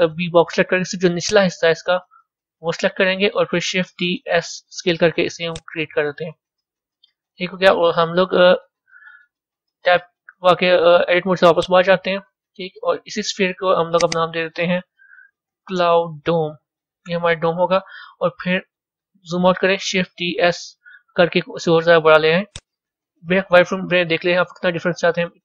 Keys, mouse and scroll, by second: 3.8 shift+d, 5.9-8.9 middle drag, 10.0 Tab, 10.9 z, 13.8 click, 14.0-17.1 drag, 18.5-20.0 scroll down 4, 20.0 shift+d, 22.9 z, 23.9-25.4 middle drag.